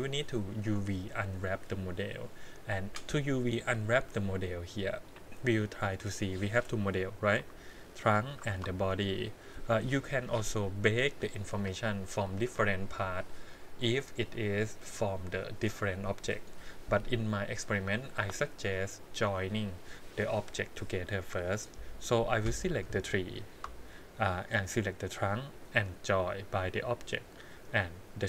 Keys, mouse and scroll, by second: 3.9-5.6 drag, 6.1 click, 7.4 g, 8.5 ctrl+z, 22.6 click, 22.9 click, 24.5 shift+click, 26.7 click, 28.1-28.2 drag.